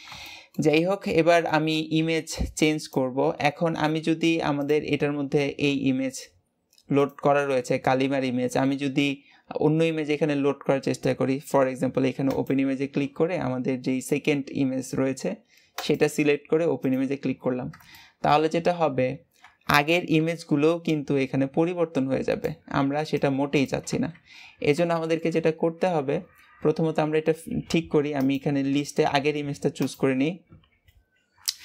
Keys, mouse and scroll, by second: 0.1 shift+middle click, 0.8-1.3 scroll up 1, 1.3 shift+middle click, 1.9 g, 4.5 click, 12.1-15.3 drag, 17.5-17.9 scroll down 2, 17.9-24.1 shift+middle drag, 24.5 scroll up 1, 24.9-28.0 shift+middle drag, 28.1 click.